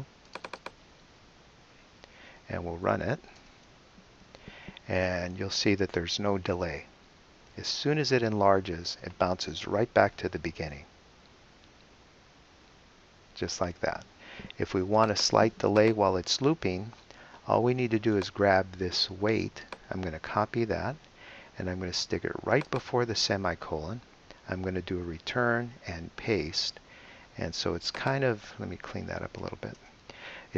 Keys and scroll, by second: 1.4-2.5 typing, 3.4 super+Return, 20.5 super+c, 24.9 Return, 25.9 super+Return, 26.3 super+v, 29.4 BackSpace.